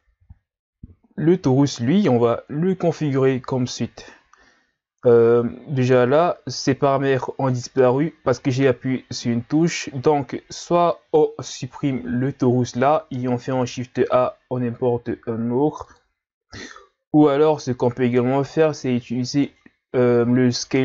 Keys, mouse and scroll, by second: 2.6 KP_Divide, 4.9-6.1 scroll down 1, 6.1-7.3 scroll down 1, 7.3-7.9 scroll down 1, 12.3 Delete, 13.6 shift+a.